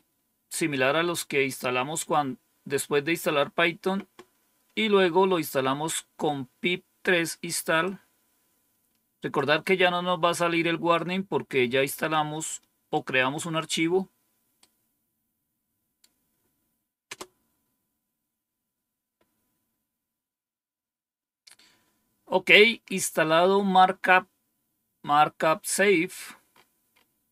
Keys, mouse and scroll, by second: 7.7-9.3 drag, 10.8-12.9 right drag, 14.5-15.9 right drag, 17.0 Return, 23.8-24.6 scroll down 1, 25.6-26.4 scroll down 1, 26.4-27.3 scroll up 1.